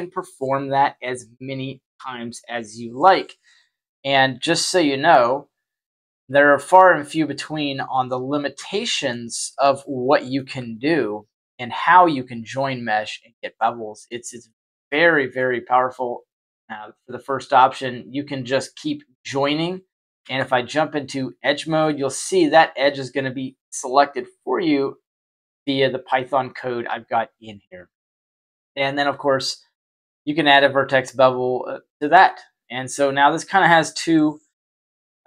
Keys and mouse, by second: 6.0 shift+a, 8.0-9.0 middle drag, 10.0 middle click, 10.5 g, 11.9-13.5 middle drag, 14.4-14.7 shift+middle drag, 15.0 middle click, 17.6 click, 20.1 Tab, 21.8-26.5 middle drag, 27.6 Tab, 29.5 click.